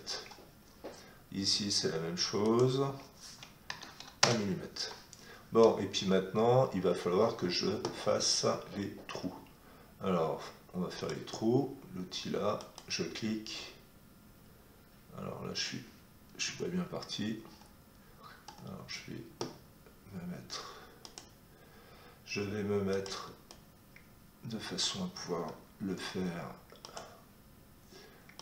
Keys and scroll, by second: 3.6 1, 4.2 Return, 16.4 Escape, 25.8 Escape.